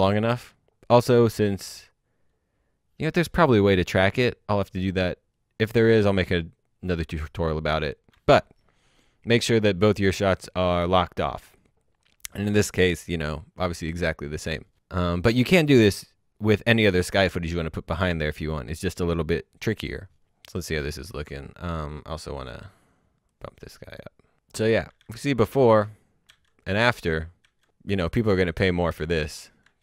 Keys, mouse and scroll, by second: 5.8-6.9 scroll up 1, 20.0-20.9 scroll up 1, 22.0 click, 23.1 click, 24.1-24.6 scroll down 1, 24.8 alt+Num_Lock, 24.9 d, 27.9 alt+Num_Lock, 27.9 typing, 28.8 alt+Num_Lock, 28.9 d.